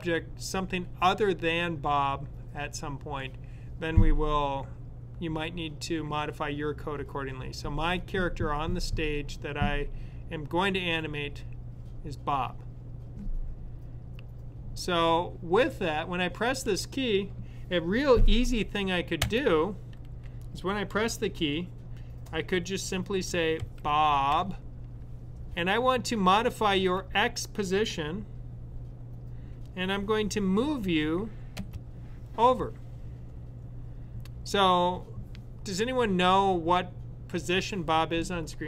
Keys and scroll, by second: 23.4-25.5 typing, 26.7 typing.